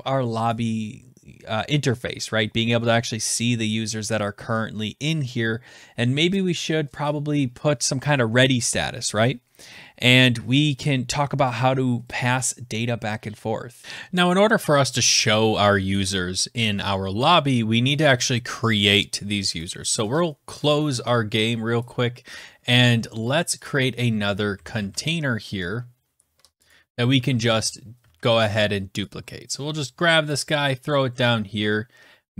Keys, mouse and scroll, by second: 13.8 click, 20.5 click, 23.6 click, 24.5 ctrl+c, 24.8 ctrl+v, 26.7 click, 27.3 ctrl+s, 28.0 ctrl+d, 30.8-32.3 scroll up 1.